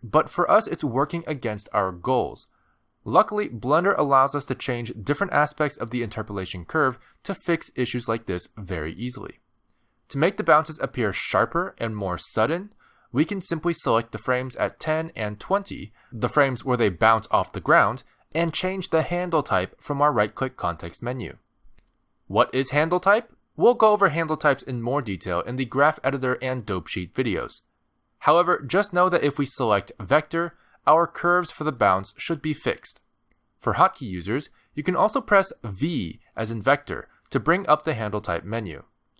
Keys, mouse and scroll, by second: 13.5 space, 14.7 click, 19.0 click, 20.2 shift+click, 21.7 right click, 33.7 space, 35.9 space, 36.8 v.